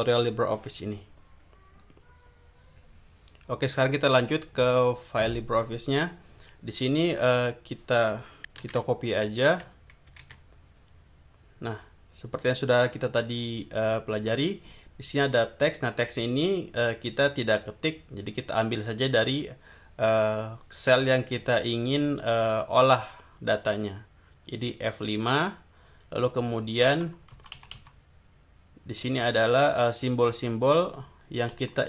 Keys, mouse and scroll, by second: 4.4 click, 8.6 ctrl+c, 9.4 ctrl+click, 10.1 ctrl+v, 13.2 click, 27.3 Right, 29.0 Right, 31.5 Right.